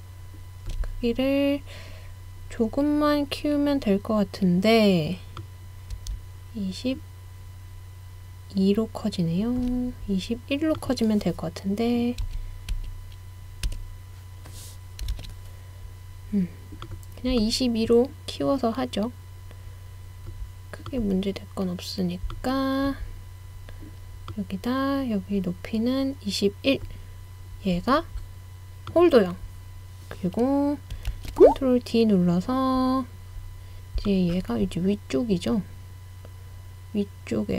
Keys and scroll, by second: 12.3-12.8 typing, 13.7 Return, 15.1 super+z, 31.1 super+d.